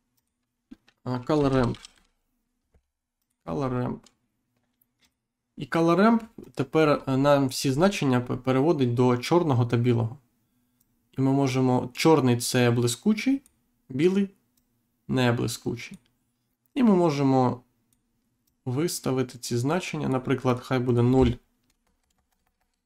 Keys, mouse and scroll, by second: 0.1 click, 1.6 l, 3.1 click, 4.9 click, 6.3 click, 6.9-7.3 scroll up 1, 7.6-8.0 scroll up 1, 8.1-8.5 scroll down 1, 8.7-9.2 scroll down 1, 10.7 click, 14.5 click, 16.6 click, 18.4 click, 21.7 BackSpace.